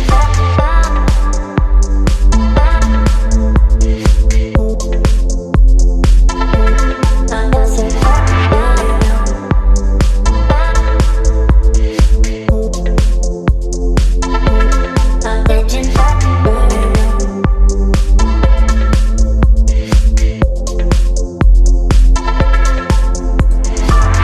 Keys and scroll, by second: 1.3 space, 3.2 space, 8.1 space, 11.2 Delete, 12.0 v, 13.3 space, 14.3 ctrl+t, 18.4 Return, 20.3 space, 21.4 ctrl+t.